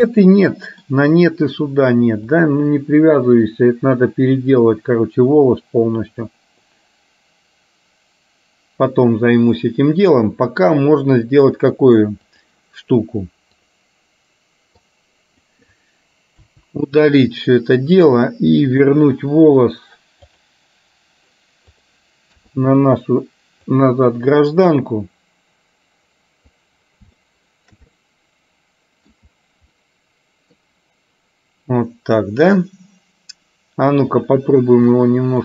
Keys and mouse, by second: 0.2 middle click, 2.5-12.7 drag, 13.6 click, 14.8 click, 16.6 Delete, 18.8-20.7 drag, 21.8 click, 22.5 KP_3, 23.8-26.6 drag, 27.2 shift+middle click, 28.0-29.2 middle drag, 29.8 middle click, 34.2 click.